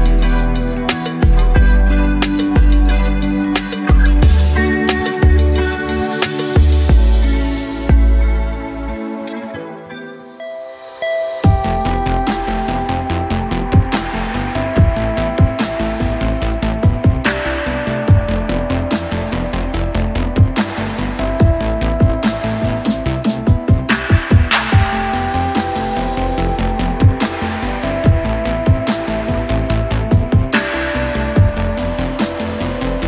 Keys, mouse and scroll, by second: 0.4 click, 0.9 scroll down 1, 1.9-3.5 drag, 4.0-5.2 drag, 6.6 right click, 7.7 click, 8.6 right click, 9.7 click, 11.7 click, 12.9 click, 13.7 click, 14.2-15.3 typing, 15.7 scroll down 2, 16.3-16.6 scroll, 16.3-17.1 typing, 16.6 click, 20.8-22.4 scroll down 7, 22.4-23.0 scroll up 3, 23.4 scroll down 2, 23.9 scroll down 1, 24.3-25.4 scroll up 5, 25.8 scroll down 2, 26.2 alt+click, 26.6 alt+middle click, 26.9 scroll up 1, 27.1 alt+click, 27.6 middle click, 27.6 alt+scroll up 1, 27.9 alt+click, 28.3 alt+click, 28.9 shift+right click, 29.8 alt+click, 30.3 alt+click, 30.7 shift+right click, 31.5 alt+middle click, 31.8 scroll down 2, 32.2-33.0 alt+drag.